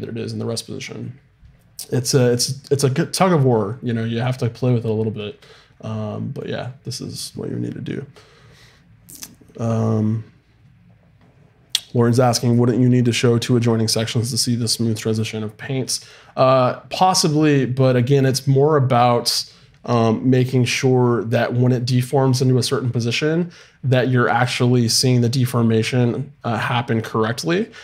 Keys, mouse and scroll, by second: 5.2-6.3 middle drag.